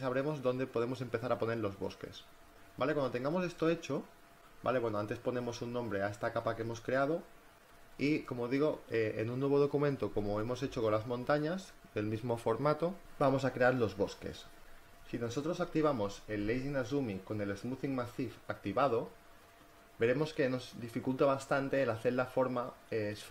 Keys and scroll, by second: 2.7-4.6 typing, 15.5 space.